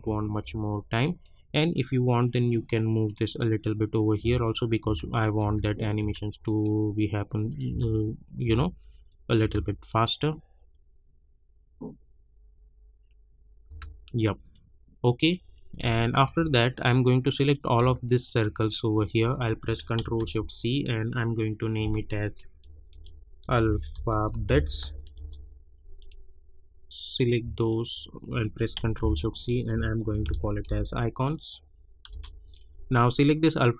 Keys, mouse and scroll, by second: 0.0 j, 0.4 j, 1.2-4.2 drag, 4.2 space, 5.2 click, 5.4 space, 6.4 click, 7.6 space, 9.0 click, 9.4 space, 13.6 space, 14.5-15.8 drag, 15.8 space, 17.4 click, 18.2 shift+click, 20.1 ctrl+shift+c, 22.6 ctrl+shift+c, 22.7-25.3 typing, 27.0 click, 27.7 shift+click, 28.9 ctrl+shift+c, 29.8-31.1 typing, 32.1 Return, 33.3 click.